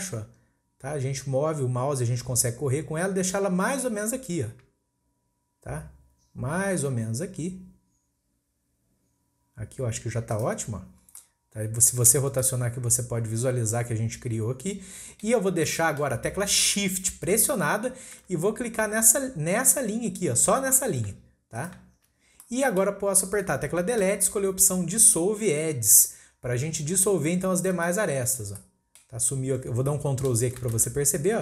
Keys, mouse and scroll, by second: 10.7-11.1 scroll down 4, 11.1 scroll up 1, 11.2 middle click, 12.1 scroll up 2, 12.4-15.4 middle drag, 15.5 scroll up 1, 15.7-18.7 middle drag, 19.0-21.3 scroll up 1, 21.5 shift+click, 22.3 scroll down 1, 22.4-24.0 middle drag, 24.0 Delete, 28.5 scroll down 1, 28.6-30.7 middle drag, 30.7 ctrl+z.